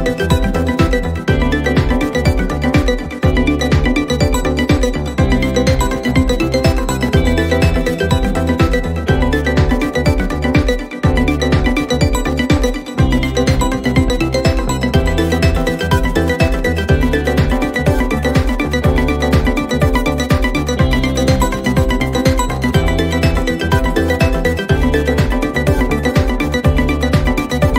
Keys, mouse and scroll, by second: 0.1 click, 0.3 u, 2.8 click, 5.3 click, 7.0 click, 9.1 click, 10.0 ctrl+d, 11.2 u, 13.5 click, 13.7 click, 14.5-16.3 scroll, 19.4 scroll, 19.5-22.1 drag, 23.6-27.2 drag.